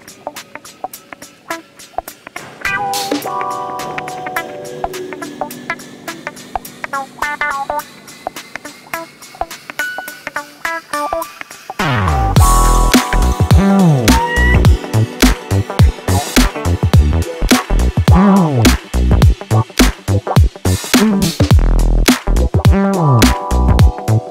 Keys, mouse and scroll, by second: 0.6 click, 1.1 click, 2.2 click, 2.8-4.7 drag, 5.4 s, 9.6 click, 10.0 click, 11.3 click, 12.2 click, 12.8 click, 13.7 click, 14.4 click, 16.2 click, 17.1 click, 17.6 click, 18.7 s, 21.1 click, 21.8 s, 23.5 Delete.